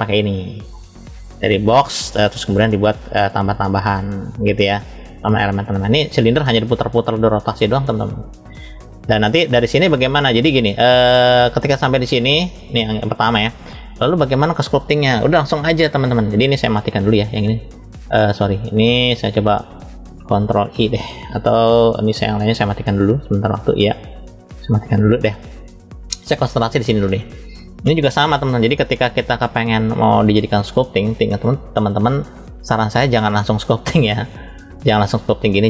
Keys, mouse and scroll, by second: 0.2 click, 0.2 scroll up 2, 1.2 drag, 1.8 click, 4.3 middle click, 5.7 click, 6.4-7.2 middle drag, 10.5 click, 11.7 click, 13.8 scroll down 1, 14.8 click, 17.2 click, 17.8 click, 23.3 click, 24.5 click, 25.8 click, 26.5 click, 26.9 click, 28.2-29.2 shift+middle drag, 29.8 click, 33.1-34.8 drag.